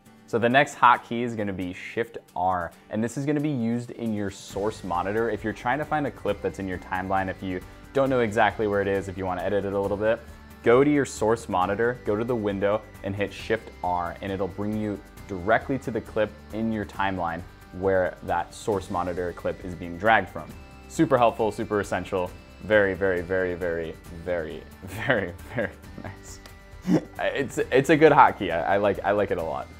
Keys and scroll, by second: 1.7 shift+r.